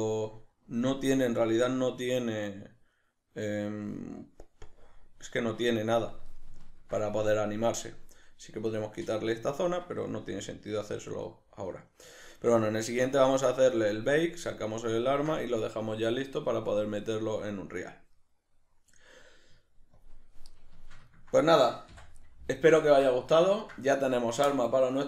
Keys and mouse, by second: 20.0-20.6 drag, 20.6-25.0 shift+middle drag, 21.9 n.